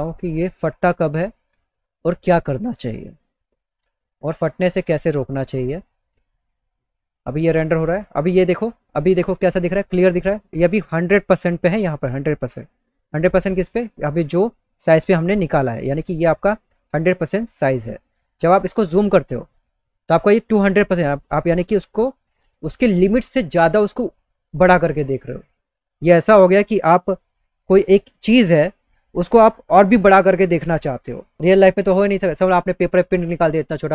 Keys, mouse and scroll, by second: 8.1 click.